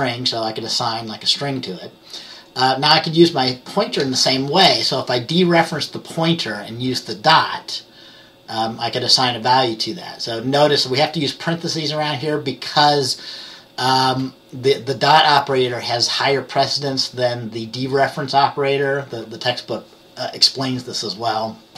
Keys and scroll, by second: 1.4 F10.